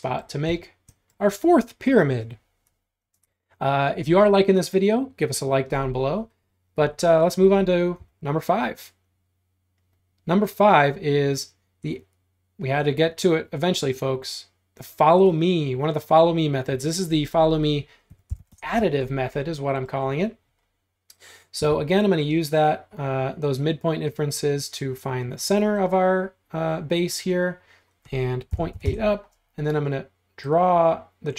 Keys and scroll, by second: 8.0 r, 17.9-18.9 typing, 20.2-21.6 typing, 28.3-29.3 typing.